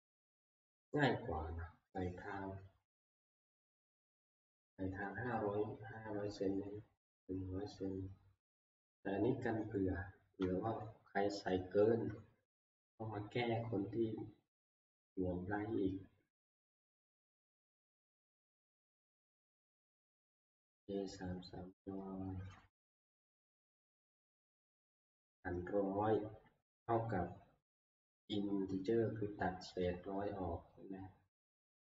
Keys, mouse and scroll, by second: 10.9 Right, 11.4 Left.